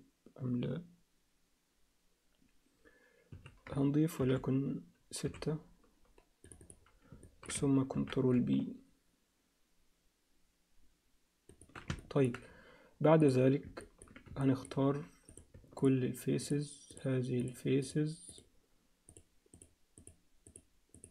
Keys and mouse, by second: 4.2 ctrl+r, 7.2 ctrl+alt+middle click, 8.0 ctrl+b, 12.0 ctrl+alt+middle click, 13.2 click, 13.8 ctrl+alt+middle click, 14.4 shift+middle click, 14.5 alt+shift+click, 15.3 click, 16.5-17.5 shift+drag, 18.3-19.6 shift+drag.